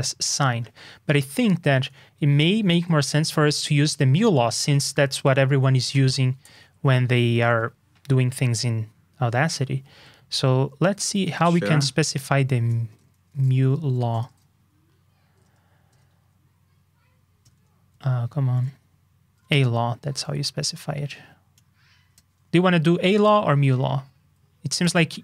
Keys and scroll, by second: 2.2 super+c, 2.6 super+Tab, 4.5 super+f, 13.3 super+f.